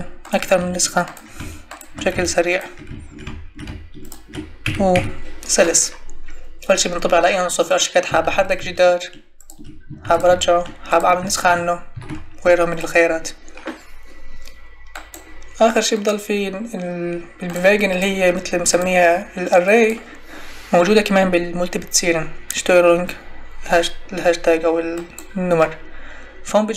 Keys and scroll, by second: 8.2 ctrl+e, 10.0 ctrl+e, 11.4 ctrl+z.